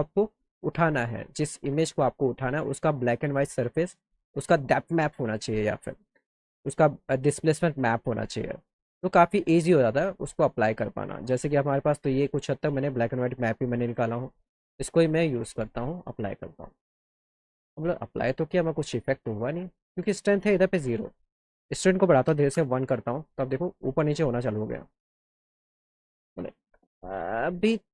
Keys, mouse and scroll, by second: 6.1 click, 7.8 click, 11.0 click, 11.2 click, 12.5 click, 15.5 click, 20.6 click, 22.6 KP_Enter, 23.4 scroll up 2, 23.6 alt+middle click.